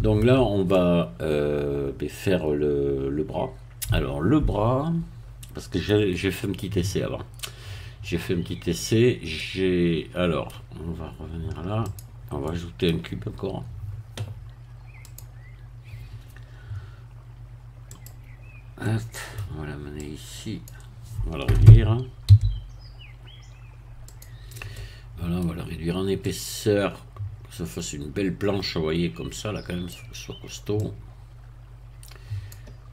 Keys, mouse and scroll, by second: 0.7-6.3 shift+middle drag, 6.6-8.9 middle drag, 8.9-9.4 scroll down 1, 9.4-10.6 middle drag, 11.8 click, 12.4 middle click, 15.0 click, 17.9 click, 18.8 middle click, 20.0 click, 20.6-21.2 scroll down 1, 22.2 s, 24.1 click, 24.8 middle click, 26.2-30.1 drag, 30.8-32.9 drag.